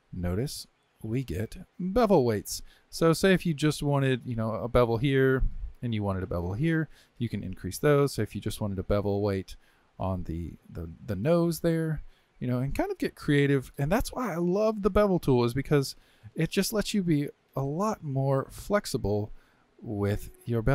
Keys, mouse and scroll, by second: 4.4 click, 6.1-8.1 drag, 9.7-11.7 drag, 11.7-15.8 middle drag, 15.8 click, 16.7 shift+click, 18.9-20.7 drag.